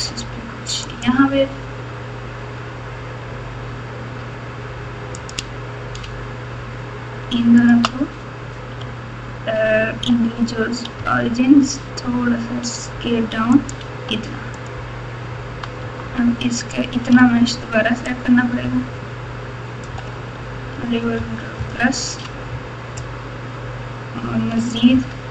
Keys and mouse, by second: 5.1 click, 10.9 s, 14.5 click, 15.8 Tab, 17.1 alt+z, 18.1-19.8 drag, 21.1 ctrl+KP_Add, 21.5 ctrl+KP_Add, 24.9 ctrl+KP_Add.